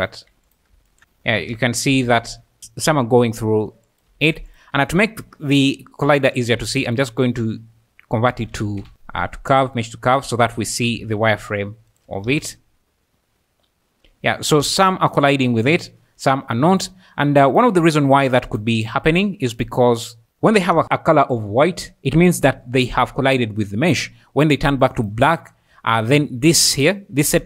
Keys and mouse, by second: 0.0-2.9 typing, 0.5 click, 3.5 click, 3.9 click, 4.2 g, 6.0 `, 6.6 shift+a, 10.1 click, 10.6 `, 11.0 alt+a, 11.9 shift+click, 12.3-15.6 typing, 13.0 middle click, 16.8 click, 18.1 click.